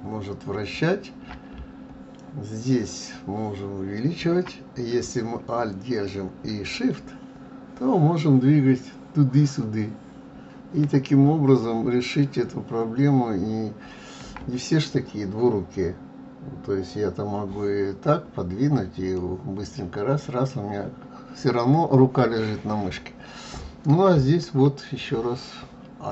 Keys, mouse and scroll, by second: 1.9-4.9 ctrl+middle drag, 7.0-10.0 shift+middle drag, 11.6-14.6 middle drag, 18.3-18.7 scroll down 4, 18.7-19.2 scroll up 8, 19.2-22.2 middle drag, 25.1-26.1 middle drag.